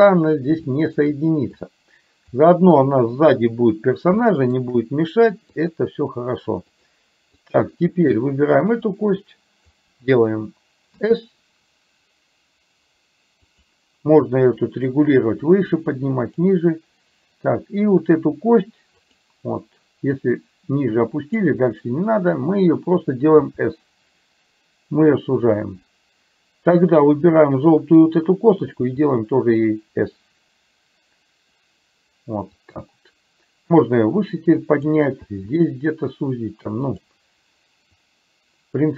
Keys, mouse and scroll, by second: 0.8 shift+middle click, 1.7 click, 4.4 shift+middle click, 5.7 click, 6.8 click, 7.4 click, 8.7-9.8 drag, 11.0 s, 14.5-16.5 drag, 20.2-21.4 drag, 23.4 s, 28.8 s, 33.8-35.0 drag, 35.3 s, 38.0-38.9 drag.